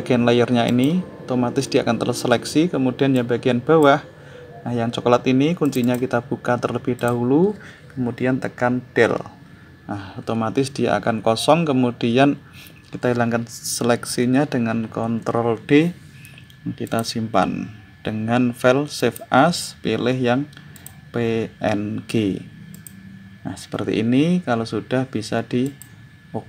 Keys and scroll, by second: 8.8 Delete, 14.4 ctrl+d.